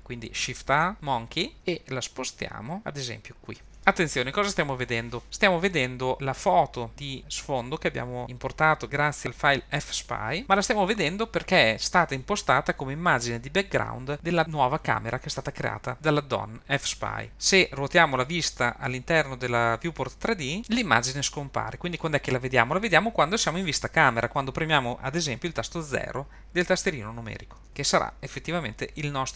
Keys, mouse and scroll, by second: 0.9 shift+a, 2.4 g, 3.8-6.1 scroll up 2, 17.3-18.0 middle drag, 18.0-18.7 scroll down 3, 18.7-20.6 middle drag, 22.0-27.7 middle drag, 27.7 KP_0.